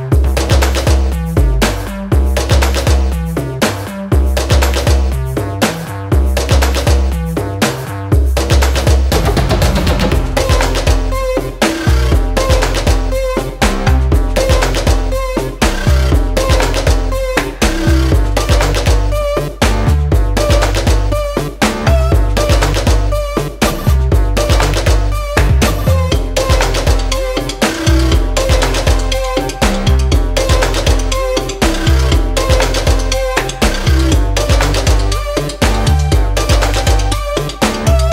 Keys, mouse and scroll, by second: 4.1 click, 7.0-14.2 drag, 17.5 click, 20.7 click, 25.0 right click, 27.8 click, 30.6 ctrl+a, 31.5 click, 36.7 click.